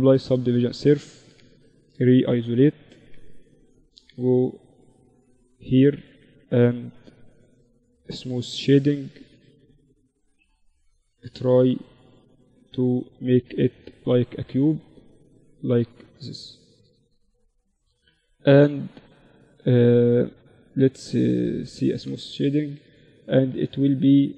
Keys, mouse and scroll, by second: 0.5 Tab, 1.0 KP_Divide, 1.9 Tab, 2.7 ctrl+r, 5.0 ctrl+r, 6.7 Tab, 7.5 ctrl+t, 8.1-9.2 drag, 8.5 t, 9.2 Tab, 10.0 ctrl+r, 12.7 ctrl+r, 15.1 Tab, 16.6 Tab, 17.5 Tab, 19.9 t, 20.4-24.3 drag, 20.7 t.